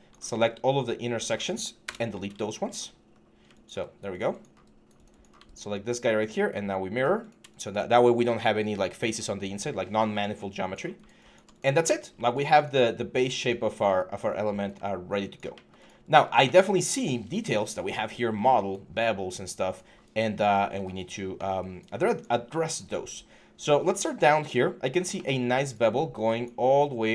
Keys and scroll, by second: 1.6 BackSpace, 7.7 6, 9.0 5.